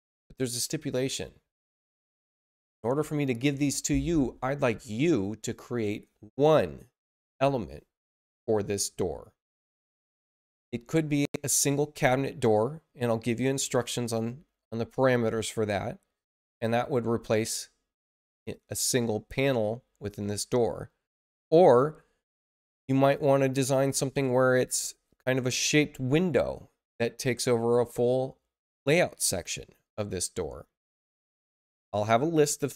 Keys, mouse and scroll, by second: 18.3 click.